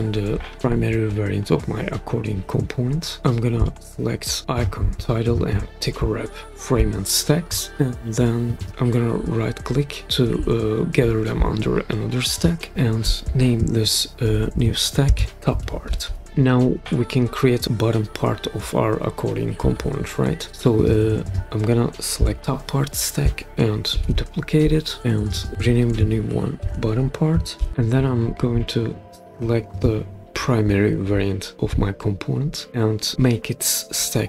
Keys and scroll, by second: 13.8-16.5 typing, 23.9 super+d, 25.5 BackSpace, 26.5-27.5 typing.